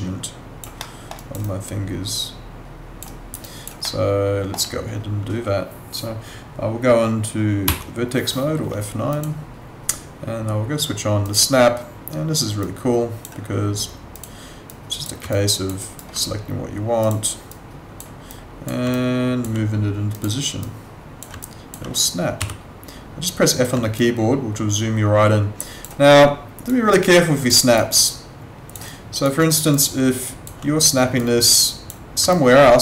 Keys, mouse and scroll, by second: 0.8 alt+middle click, 1.1 alt+right click, 1.4 alt+click, 3.1 alt+right click, 3.4 alt+click, 3.8 alt+middle click, 7.7 F9, 9.1 click, 15.3 alt+click, 15.8 alt+right click, 17.0 click, 18.9 alt+click, 21.4 alt+click, 22.4 f, 23.9 alt+click, 26.0 alt+right click, 26.9 alt+click, 27.5 alt+right click, 28.0 alt+click, 28.9 alt+right click, 29.7 alt+click, 32.3 alt+click.